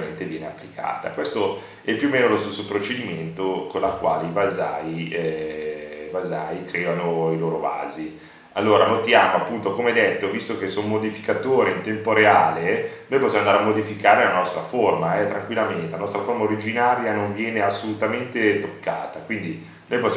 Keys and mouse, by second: 3.0-5.6 drag, 6.3 g, 13.1-14.2 middle drag, 14.6 middle click.